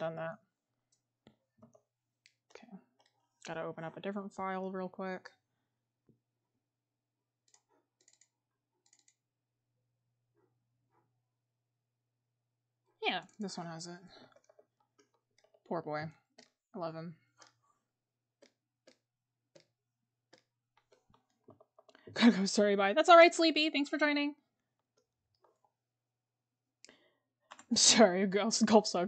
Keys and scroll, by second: 14.3-14.8 scroll up 1, 14.8 scroll, 15.5-16.1 scroll up 1, 20.7 scroll, 21.5 scroll up 1.